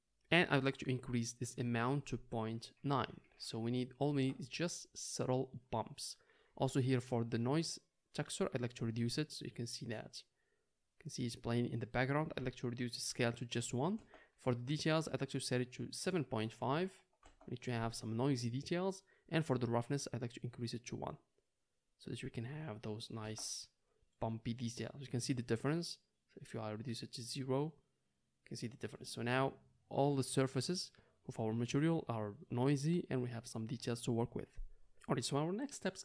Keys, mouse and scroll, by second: 11.6 middle click, 12.6-21.8 drag, 21.8 middle click, 22.2-36.0 drag.